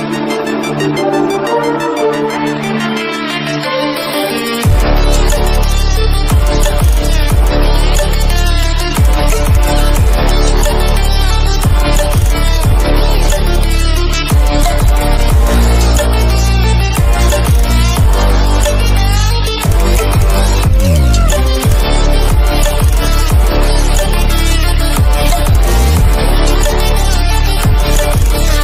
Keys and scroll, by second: 2.0 ctrl+-, 24.5 ctrl+-.